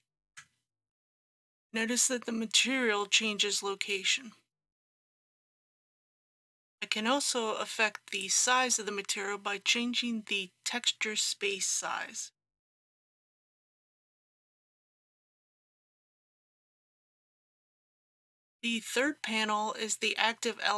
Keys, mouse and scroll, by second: 8.2-17.7 drag.